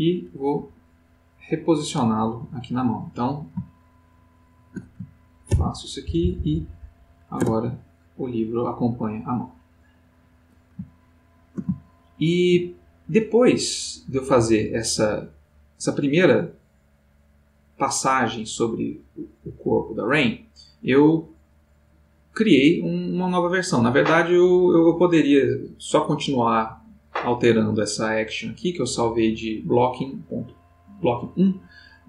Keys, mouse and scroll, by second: 0.5 Right, 3.8 shift+click, 5.5 ctrl+p, 6.0 ctrl+Down, 7.4 ctrl+Return, 10.1 click, 11.0-12.6 ctrl+middle drag, 14.1-20.9 drag.